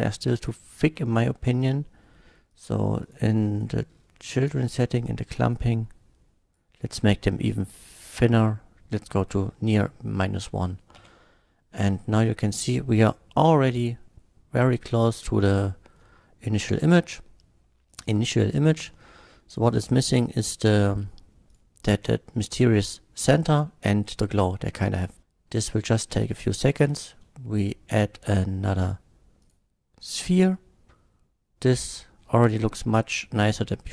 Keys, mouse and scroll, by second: 2.5 click, 3.0 click, 3.4 click, 4.0 middle click, 4.7 click, 5.5-6.5 drag, 7.1 shift+middle drag, 9.4 scroll up 1, 10.2 middle click, 11.0 F12, 15.7 middle click, 17.9 click, 19.0-19.4 shift+middle drag, 19.7 shift+click, 21.5 shift+click, 27.0 shift+a, 29.4 click, 30.9-32.1 middle drag, 32.4 middle drag, 33.1-33.9 middle drag.